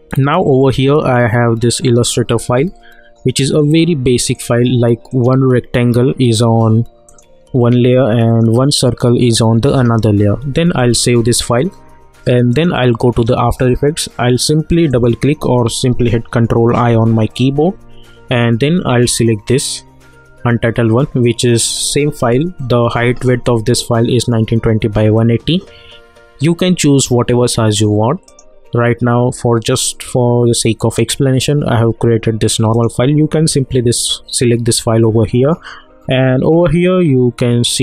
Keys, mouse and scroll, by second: 3.4 click, 10.7 s, 12.5 click, 14.9 click, 16.7 ctrl+i, 19.7 click, 28.2 click, 30.9 click.